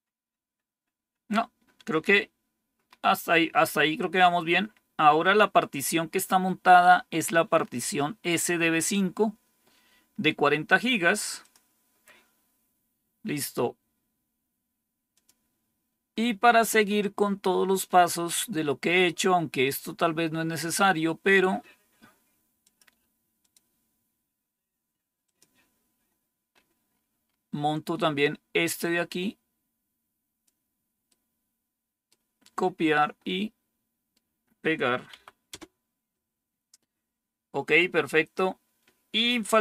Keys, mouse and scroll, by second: 4.0-5.8 drag, 11.3 click, 15.0 click, 16.5-17.4 scroll down 5, 17.9-18.5 scroll down 4, 22.5 click, 23.3 click, 25.1 click, 26.4-27.8 scroll down 1, 27.8-28.7 scroll down 1, 28.7-30.3 drag, 30.9-31.9 right drag, 33.1 right click, 35.0 Tab, 35.4 Return.